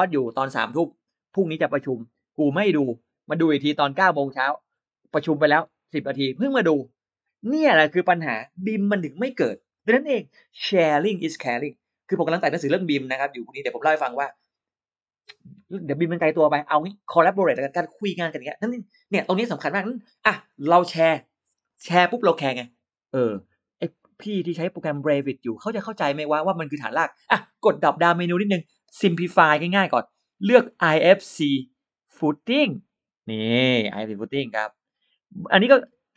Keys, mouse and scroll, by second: 29.1 click, 30.5 click, 33.7 scroll down 1, 34.3-34.6 scroll down 1.